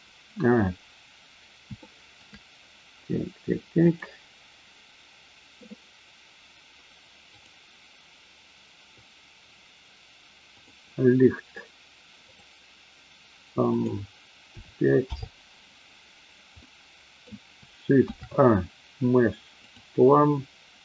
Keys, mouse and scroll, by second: 1.8 shift+middle drag, 3.9 click, 10.6 click, 12.2 click, 13.7-15.3 drag, 16.5-17.2 middle drag, 17.9 shift+a.